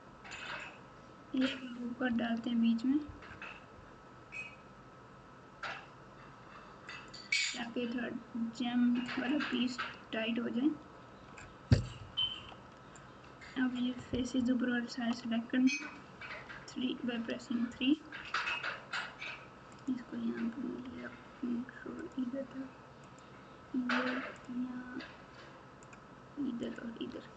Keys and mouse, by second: 2.0 ctrl+r, 10.3 Tab, 11.0 Tab, 11.9 KP_4, 12.1 KP_4, 14.3 KP_4, 14.8 ctrl+KP_4, 16.4 3, 19.8 click, 22.0 ctrl+click, 23.1 ctrl+click, 26.6 ctrl+click.